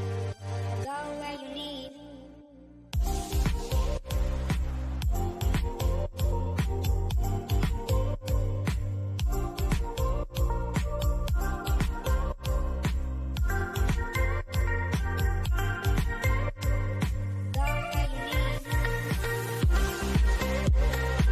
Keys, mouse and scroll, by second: 0.4 click, 1.2 g, 2.0 click, 11.2 click, 14.7 click, 19.6 scroll up 1.